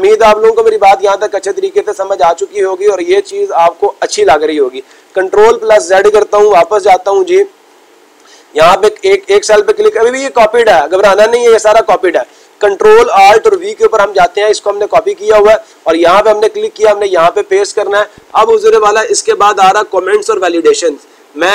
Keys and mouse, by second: 9.4 click.